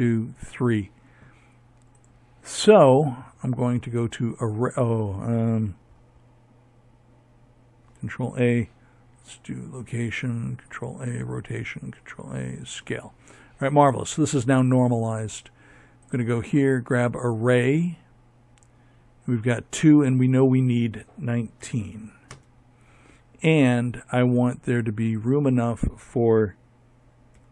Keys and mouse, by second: 6.1 ctrl+a, 7.8 ctrl+a, 9.6 ctrl+a, 13.9-20.1 drag.